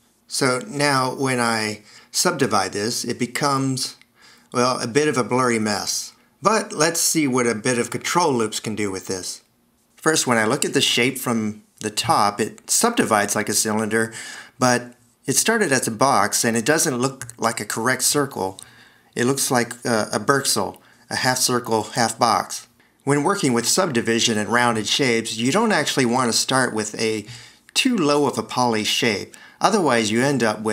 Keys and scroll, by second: 3.9 c, 16.6 shift+super+i.